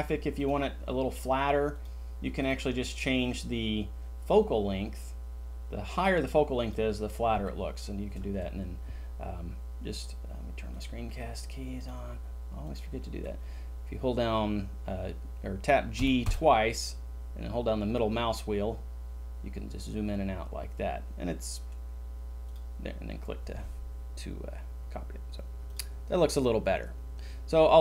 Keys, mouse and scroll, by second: 16.0 g, 16.2 g, 16.7 middle click.